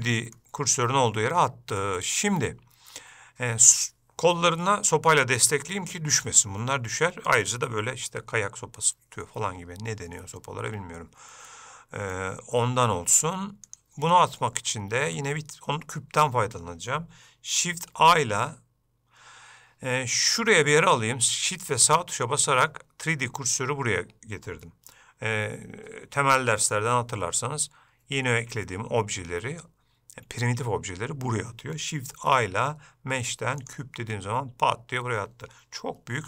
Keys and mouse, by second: 0.1 middle click, 2.0-3.9 middle drag, 11.6 middle click, 14.9 shift+middle click, 18.1 shift+a, 22.0 shift+right click, 32.3 shift+a.